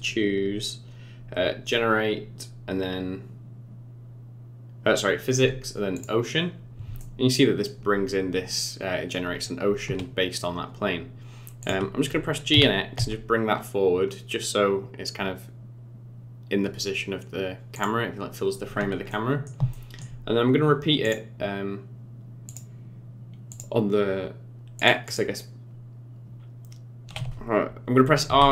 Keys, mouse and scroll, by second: 7.0 middle click, 8.2 scroll down 4, 9.4-10.3 scroll down 10, 10.9-11.6 scroll up 1, 11.6 click, 12.5 g, 19.0 middle click, 19.7 shift+middle click, 21.0 click, 22.4 click, 23.5 click, 24.7 click, 25.0 click, 28.3 r.